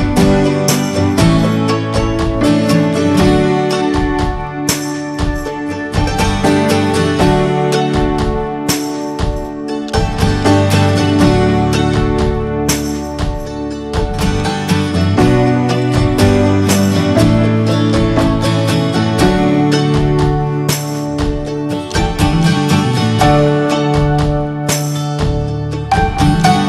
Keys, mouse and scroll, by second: 0.9 scroll up 4, 1.3-2.9 middle drag, 2.9-3.4 scroll up 2, 3.4-4.7 shift+middle drag, 4.7-5.4 scroll down 1, 5.4-6.4 shift+middle drag, 6.4 scroll down 1, 6.7-8.8 middle drag, 9.2-9.5 scroll up 2, 9.5-12.6 shift+middle drag, 12.6 b, 13.1-16.6 shift+middle drag, 17.0 scroll up 2, 17.3-22.2 shift+middle drag, 22.2-24.8 drag, 24.8-26.6 scroll down 5.